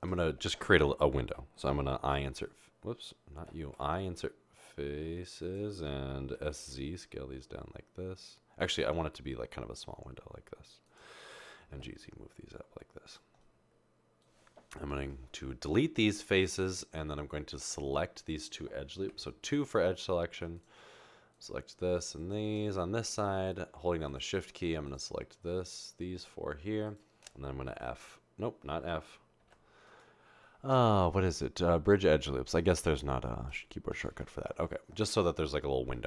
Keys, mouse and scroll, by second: 2.3 typing, 3.7 typing, 6.4 typing, 11.9 typing, 14.9 Delete, 19.6 2, 29.4 ctrl+z, 29.4 f.